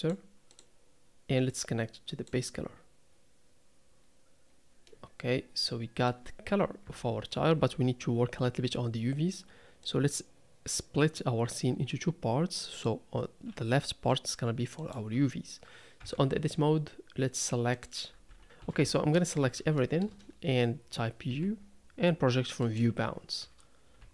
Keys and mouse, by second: 1.7 click, 4.9-6.6 middle drag, 6.8 KP_3, 9.9-11.6 drag, 14.9 click, 16.0 Tab, 17.7 click, 18.1-19.4 typing, 18.4 ctrl+space, 19.8 shift+click, 21.3 u.